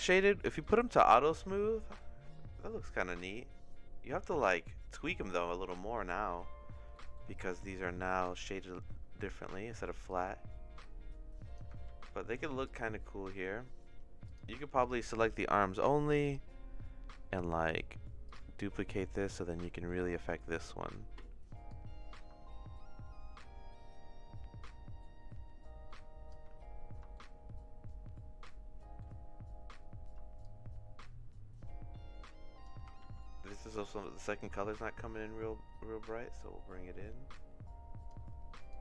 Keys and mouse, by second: 0.6 click, 2.0-3.1 shift+middle drag, 4.0 middle click, 4.4 shift+middle click, 6.9 middle click, 7.8 middle click, 8.6 middle click, 9.2 middle click, 10.0-11.5 drag, 11.9 ctrl+z, 12.7 click, 14.3 click, 16.3 click, 18.3 click, 19.1 middle click, 19.7 middle click, 20.4 middle click, 21.8-26.3 drag, 27.1-29.0 shift+middle drag, 30.5-32.6 shift+drag, 33.1 ctrl+z, 34.2-38.1 shift+drag, 38.7-38.8 drag.